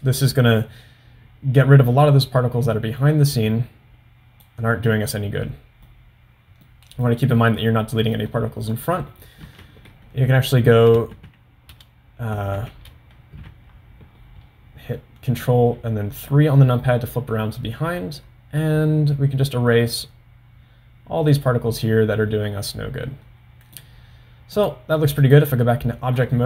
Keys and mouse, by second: 5.1-6.1 middle drag, 6.7 middle click, 8.2 middle click, 9.6 KP_3, 11.7 shift+KP_3, 12.7 shift+KP_3, 13.4 ctrl+KP_3, 15.6-24.1 drag, 24.8-25.6 drag.